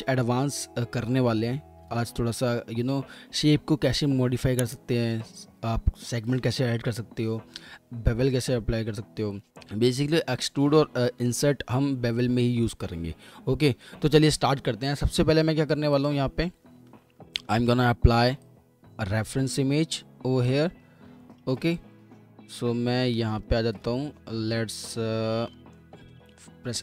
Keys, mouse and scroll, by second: 1.1 alt+middle click, 1.5 middle click, 1.6 scroll down 1, 1.7 alt+middle click, 2.1 F4, 2.3 alt+middle click, 3.3-4.1 scroll, 4.2 alt+middle click, 4.3 F4, 4.7 alt+1, 7.0 scroll down 1, 7.7-8.6 scroll up 1, 10.3 alt+middle click, 10.5 alt+middle click, 11.0-12.0 typing, 12.0 alt+middle click, 12.3 double click, 17.5 alt+w, 20.4-21.2 typing, 23.3 typing, 23.4 alt+w, 23.8 alt+w, 25.1-25.5 scroll down 1, 25.5 alt+middle click, 26.1 F4.